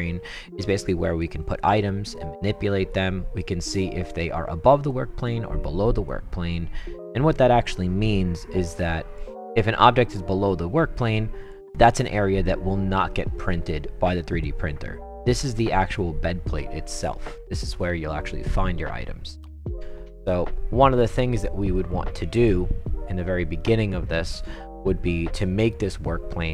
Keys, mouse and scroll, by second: 0.6-1.2 right drag, 1.6-2.3 right drag, 2.9-3.4 right drag, 3.6-4.1 right drag, 4.9-5.2 right drag, 6.0-7.1 right drag, 7.7-8.5 right drag, 8.8-9.1 right drag, 11.0 right click, 11.7 right drag, 13.1-14.4 right drag, 17.6-18.5 right drag.